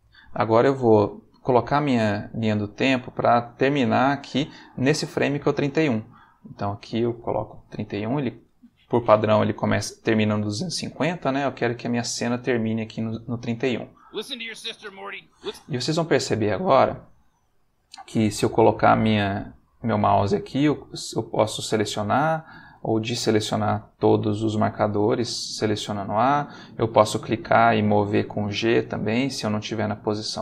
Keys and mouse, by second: 2.6 click, 6.6 click, 7.3-8.2 typing, 11.9-13.6 drag, 14.0 space, 15.4 space, 16.4 a, 20.5 a, 22.0 a, 26.4 click, 27.3 g, 28.4 Escape, 29.3 click, 29.6 g.